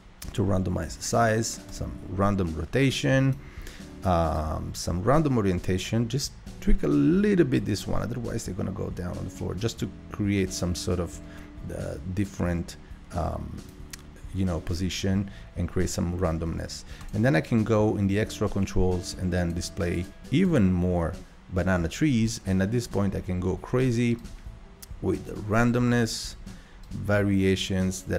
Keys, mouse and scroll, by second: 1.7-7.4 drag, 17.0-28.1 drag.